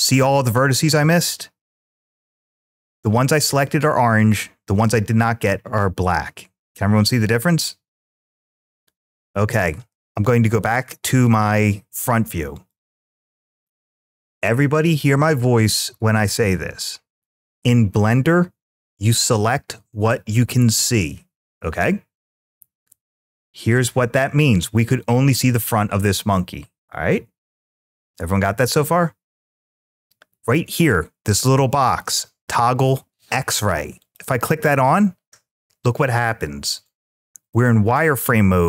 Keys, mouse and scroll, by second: 3.4-4.1 scroll up 2, 4.1-9.0 middle drag, 10.6 `, 13.4 click, 33.8 click.